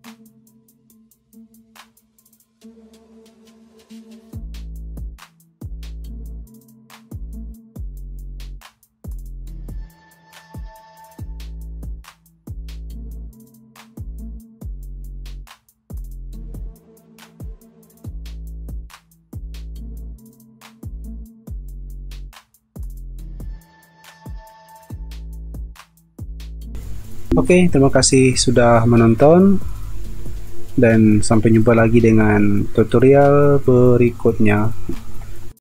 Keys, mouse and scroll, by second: 0.0 ctrl+t, 1.1 alt+scroll down 1, 1.8 alt+scroll up 1, 4.9 space, 5.4 b, 10.2 shift+click, 11.5 r, 12.7 alt+scroll up 1, 13.8 ctrl+e, 18.7 0, 23.3-23.7 alt+scroll up 1, 23.7 alt+scroll down 1, 24.4 alt+shift+click, 25.5 alt+shift+click, 26.6 f, 27.3 space.